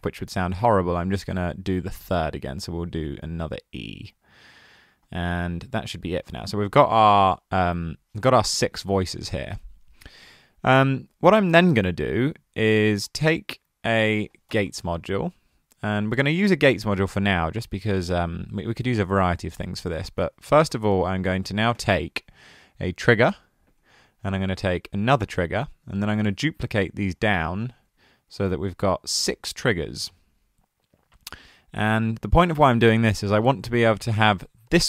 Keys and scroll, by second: 13.6 super+a, 14.3-15.4 typing, 20.2 super+a, 20.4-21.1 typing.